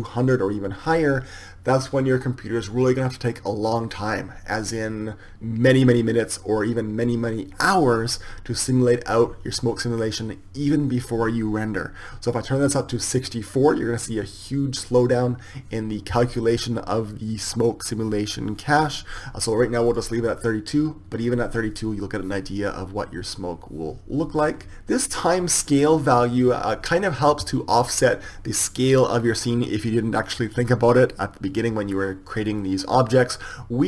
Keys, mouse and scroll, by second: 13.1-21.5 drag.